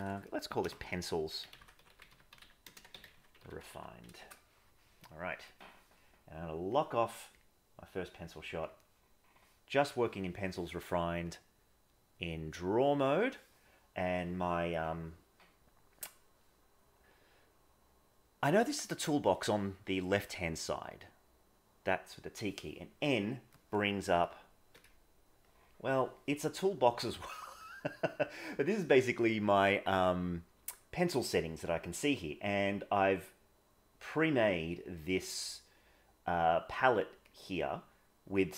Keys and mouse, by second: 11.3-12.5 drag, 24.1 n, 24.7 n.